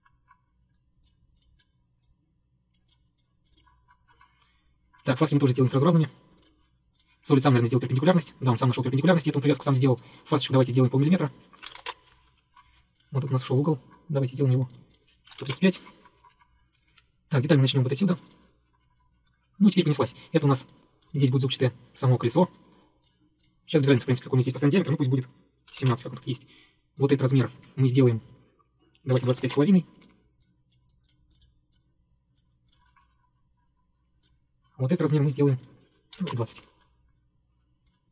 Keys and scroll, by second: 11.5-12.3 typing, 12.4 Escape, 15.1-16.0 typing, 16.9 Escape, 17.0 Escape, 25.5-26.3 typing, 27.6 Escape, 29.0-30.0 typing, 30.0 Escape, 30.1 Escape, 36.0-36.9 typing.